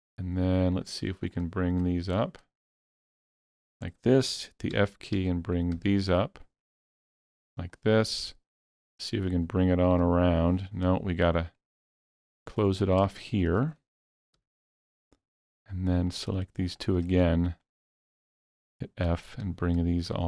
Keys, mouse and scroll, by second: 0.8 shift+click, 1.3 shift+click, 2.2 shift+click, 3.2-12.0 shift+middle drag, 4.8 f, 5.2 f, 5.8 f, 7.2 f, 9.3 f, 10.0 f, 11.5 shift+click, 12.0 shift+click, 12.4 shift+middle click, 12.9 scroll up 2, 14.4 f, 16.1 click, 16.8 shift+click, 17.1 scroll down 2, 17.6-20.2 middle drag, 18.7-20.2 typing.